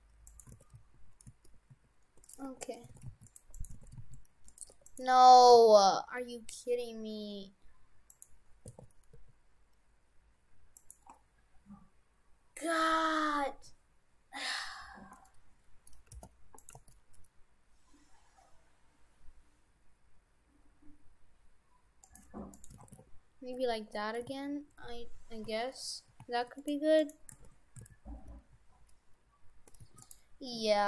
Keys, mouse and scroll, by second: 0.3 right click, 0.6 shift+f, 2.5 Tab, 3.0 shift+f, 3.6 right click, 3.8 shift+f, 4.8 Tab, 4.9 right click, 5.5 r, 8.7 r, 15.2 middle click, 16.1 g, 16.8 g, 22.6 right click, 22.8 shift+f, 27.0 right click, 27.4 shift+f.